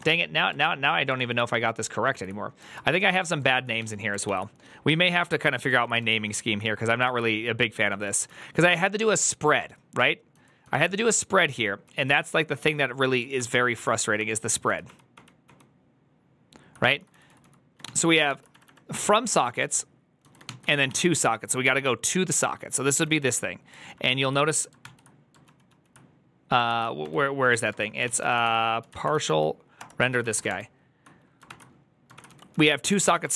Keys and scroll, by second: 0.2-1.0 typing, 1.0 ctrl+o, 2.0 ctrl+i, 2.6 ctrl+u, 3.3 ctrl+u, 3.7 typing, 4.9-5.7 typing, 6.1 ctrl+d, 7.8 ctrl+u, 7.8-9.8 typing, 11.0-12.2 typing, 13.4 ctrl+d, 14.1 ctrl+d, 15.9 ctrl+d, 16.5-20.8 typing, 22.3-23.1 typing, 24.0 ctrl+h, 24.7 ctrl+t, 25.3 ctrl+o, 26.3 ctrl+o, 26.9 ctrl+p, 26.9-30.6 typing, 27.9 ctrl+c, 29.7 Return, 31.4 ctrl+d, 32.0 ctrl+d, 32.2-33.3 typing.